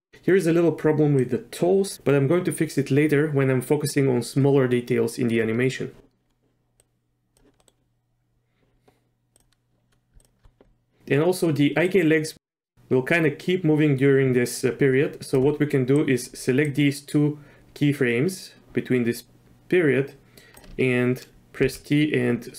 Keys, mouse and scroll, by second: 1.2 click, 6.8 click, 7.6 middle click, 9.3 click, 10.2 shift+click, 11.9-15.4 drag, 15.9 click, 16.6-20.6 drag, 21.6 t.